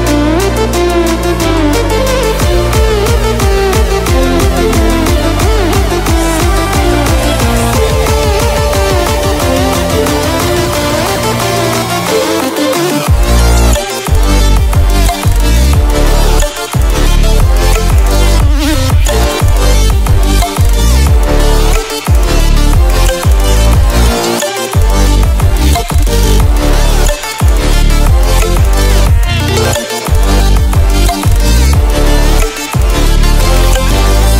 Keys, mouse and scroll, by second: 0.2 click, 1.3 ctrl+alt+scroll down 1, 2.8 ctrl+alt+scroll up 1, 3.9 click, 7.2 ctrl+alt+scroll up 1, 8.1 click, 8.8 ctrl+alt+scroll down 1, 10.1 ctrl+alt+scroll up 1, 11.9-13.9 drag, 20.2 click, 24.0 click, 28.8 click, 29.1 ctrl+alt+scroll up 1, 30.9 click, 33.1 ctrl+alt+scroll up 1.